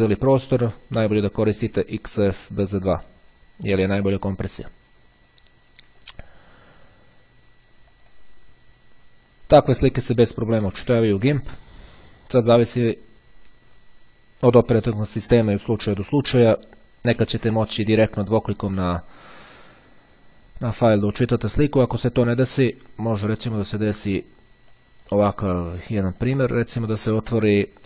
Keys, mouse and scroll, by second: 4.5 click, 5.3 click, 6.2 click, 7.8 click, 9.8 click, 24.8 click, 26.2 click.